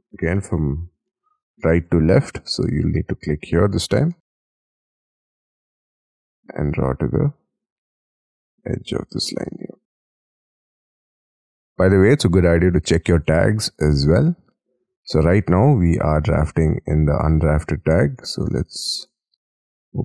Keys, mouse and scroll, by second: 0.4 middle click, 1.1 shift+middle click, 1.8-2.2 scroll up 2, 2.2 shift+middle click, 2.6-4.0 scroll up 9, 4.2 shift+middle click, 4.7 middle click, 5.1-5.5 scroll down 36, 5.7 shift+middle click, 5.9 shift+middle click, 6.1-8.4 scroll up 57, 9.5 space, 10.2-10.9 scroll down 27, 11.2 middle click.